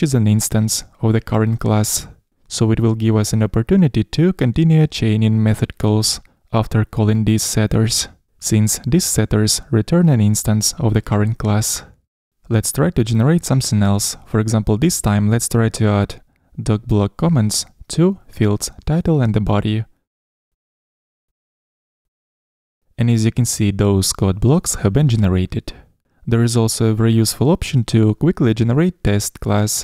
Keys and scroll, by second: 6.3 Escape, 13.4 super+n, 20.2 shift+Down, 20.9 Escape, 26.4 Escape.